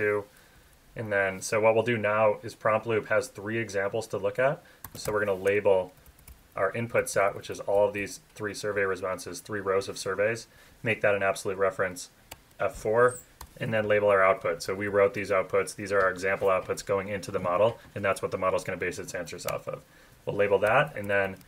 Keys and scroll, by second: 0.5 Down, 0.6 Left, 5.4 Tab, 5.9 Up, 6.0 Left, 6.1 Up, 6.2 Left, 6.4 Up, 6.9 shift+Right, 7.7 shift+Down, 12.3 F4, 13.9 Up, 14.6 shift+Down, 19.4 F4, 20.9 Left, 21.3 Right.